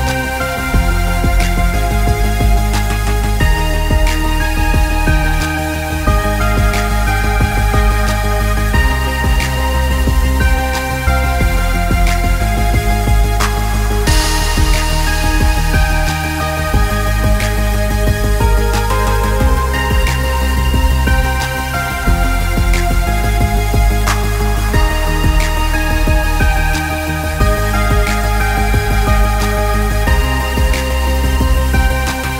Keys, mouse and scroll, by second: 2.0 g, 3.7 middle click, 4.0 middle click, 4.2 scroll down 2, 4.4 middle click, 5.4 shift+d, 6.3 g, 7.6 middle click, 8.8 shift+click, 10.2 shift+middle click, 10.7 shift+click, 11.5 middle click, 12.3 shift+click, 12.8 middle click, 13.2 right click, 14.2 right click, 15.7 middle click, 16.7 click, 17.1 click, 17.3 click, 18.4 middle click, 18.9 click, 19.5 click, 20.1 click, 23.0-23.4 click, 23.1 click, 23.7-24.9 scroll down 6, 23.9 middle click, 24.9-25.3 scroll down 1, 24.9 s, 26.3 `, 27.1 middle click, 28.1-28.6 click, 28.3 click, 28.4 click, 28.9-30.0 scroll down 5, 29.1 middle click, 30.0 s, 31.8 click, 31.9 click, 32.1 click.